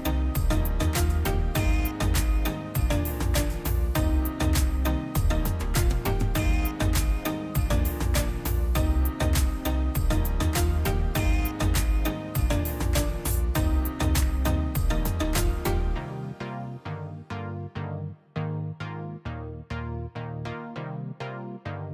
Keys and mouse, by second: 0.3 ctrl+shift+click, 1.3 drag, 2.0 ctrl+shift+click, 3.1-4.7 drag, 5.7-7.1 drag, 7.1-7.5 middle drag, 7.5 ctrl+shift+click, 8.9-10.4 drag, 12.8 middle click, 13.7 ctrl+shift+click, 15.5 middle click, 16.3 click, 17.5-18.3 drag, 18.8 middle click, 19.0-20.4 middle drag, 20.4-21.2 drag.